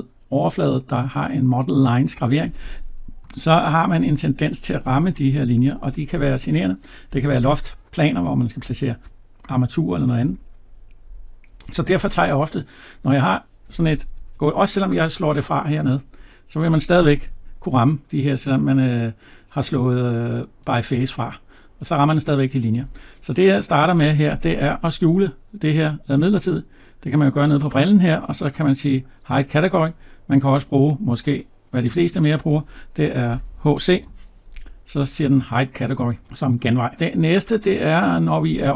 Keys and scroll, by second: 3.3 Tab, 14.1 Escape, 17.2 Tab.